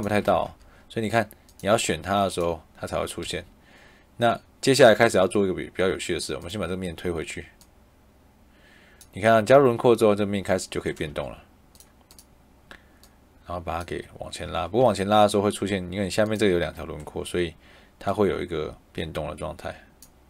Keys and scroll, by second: 0.0 Escape, 3.1 Escape, 11.0 Escape, 14.3 Escape.